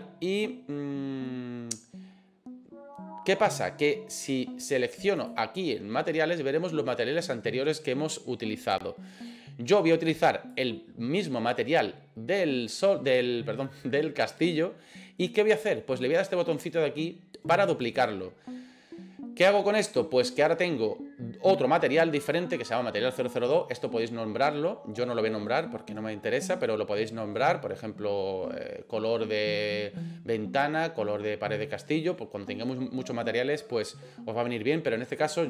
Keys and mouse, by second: 5.2 click, 17.8 click.